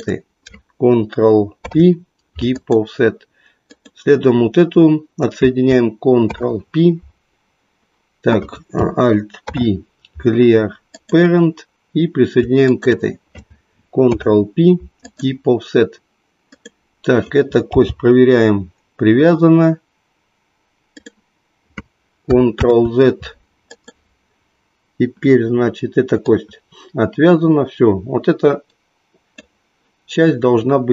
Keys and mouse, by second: 1.6 ctrl+p, 3.7 click, 6.2 ctrl+p, 9.3 alt+p, 12.6 shift+click, 13.9 ctrl+p, 17.7 g, 21.0 click, 22.6 ctrl+z, 23.7 click, 26.3-29.3 drag.